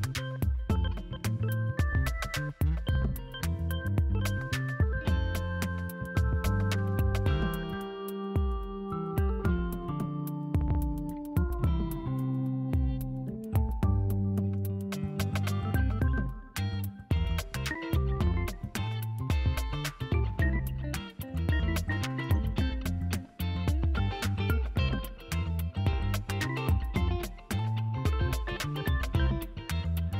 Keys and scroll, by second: 5.1 b, 6.4-7.4 typing, 8.7 space, 10.1 ctrl+space, 10.6 [, 11.1 3, 12.7 ctrl+alt+z, 13.2 1, 15.6 ctrl+alt+z, 20.2 ctrl+alt+z, 21.1 ctrl+alt+z, 21.3 space, 22.5 space, 23.6 r, 24.7 [, 24.9 ].